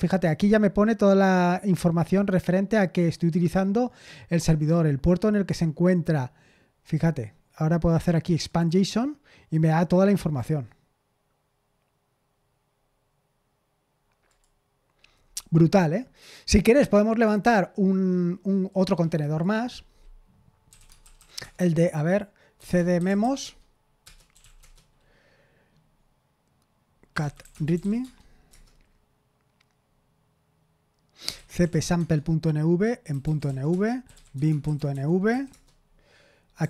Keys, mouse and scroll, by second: 8.4 click, 14.2 click, 15.2-15.8 scroll up 2, 18.7 click, 19.4 click, 20.4-24.8 typing, 24.0 Return, 26.8-28.5 typing, 30.9-36.6 typing.